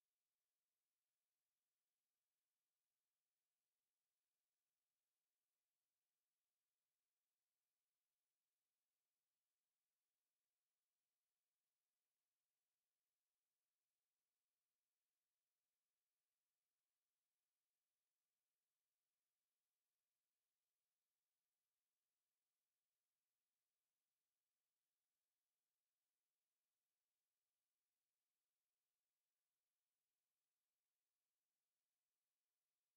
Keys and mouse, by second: 1.3 a, 1.5 click, 5.7-10.6 middle drag, 7.7 Tab, 12.8-15.3 middle drag, 19.1-21.5 middle drag, 27.6-32.9 middle drag, 32.1 Tab.